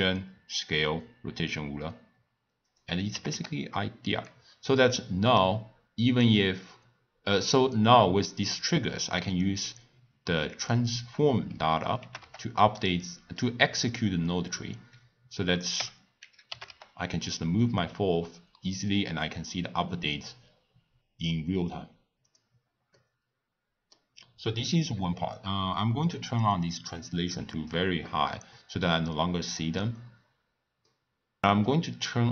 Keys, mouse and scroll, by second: 2.6 click, 3.1 g, 9.3 click, 12.0 g, 15.7 n, 16.4 g, 22.9-26.1 middle drag, 26.4-29.4 drag, 30.2-30.8 scroll down 1, 30.8-31.9 middle drag, 31.9 click.